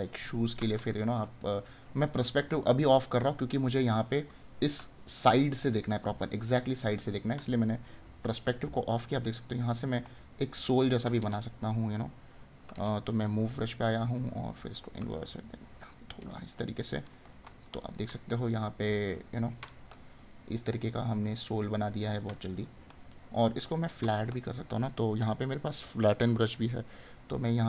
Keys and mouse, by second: 4.8 right click, 10.2 right click, 16.5 right click, 18.1 right click, 19.9 right click, 22.9 right click, 27.3 right click.